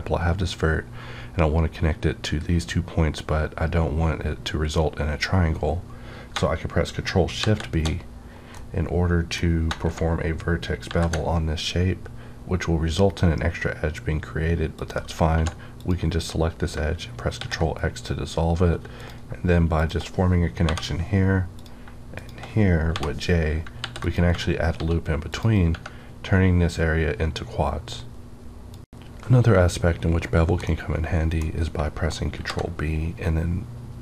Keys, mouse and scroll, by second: 9.7 shift+Num_Lock, 10.8 shift+b, 13.6-14.7 scroll down 1, 14.7 click, 15.2 2, 15.8 click, 17.4 ctrl+x, 18.7 1, 18.9 click, 19.8 shift+click, 20.6 j, 21.6 click, 21.8 click, 22.1 shift+click, 22.9 j, 23.7 ctrl+r, 24.0 ctrl+click, 24.3 right click, 24.7 s, 25.3 click, 31.8 ctrl+Num_Lock, 32.4 ctrl+b.